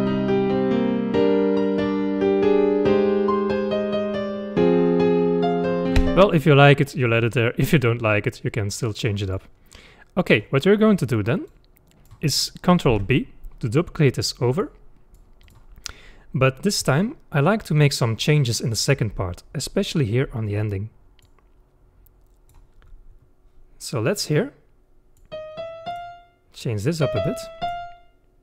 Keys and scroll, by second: 5.9 space, 12.9 ctrl+b.